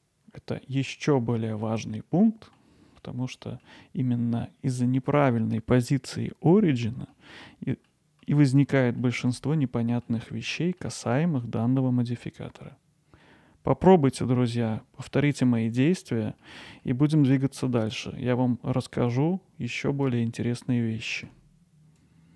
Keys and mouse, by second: 0.7 middle click, 1.3-1.9 middle drag, 2.2-2.6 middle drag, 3.0-3.6 middle drag, 7.1 middle click, 7.9-8.2 middle drag, 9.0-10.1 middle drag, 10.8 middle click, 11.2 middle click, 12.2-13.2 middle drag, 14.7-15.6 middle drag, 16.5-16.8 middle drag.